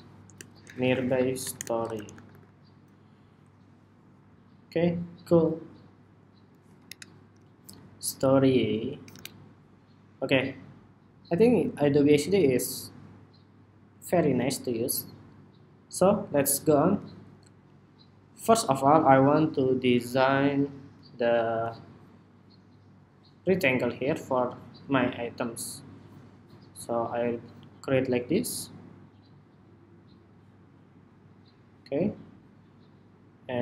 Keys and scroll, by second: 3.3 Home, 4.5 Escape, 7.0 super+-, 8.8 super+=.